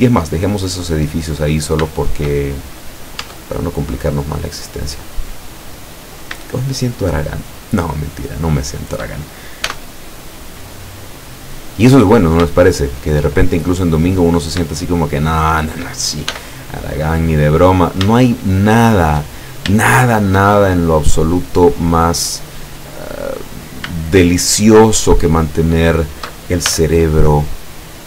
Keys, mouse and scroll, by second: 2.0-2.5 shift+middle drag, 2.9 scroll up 2, 3.0 right click, 3.3 Tab, 4.0-4.6 scroll up 2, 6.2 shift+right click, 6.7 shift+right click, 7.5 shift+right click, 8.5-9.0 shift+right drag, 9.8 e, 11.8 click, 12.6 shift+middle click, 14.3 right click, 14.8 shift+right click, 16.3 shift+e, 17.9 shift+click, 19.9 shift+middle click, 20.6 shift+scroll down 1, 23.6 right click, 24.1 shift+right click, 25.0 shift+right click, 25.4 shift+right click, 26.7 shift+e.